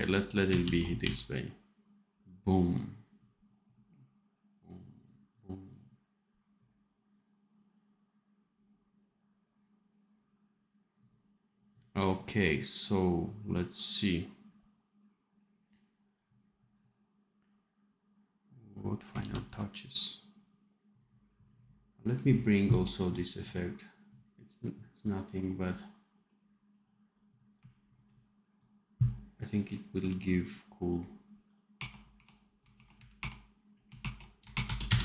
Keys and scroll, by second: 0.6 ctrl+s, 0.9 d, 19.1 ctrl+s.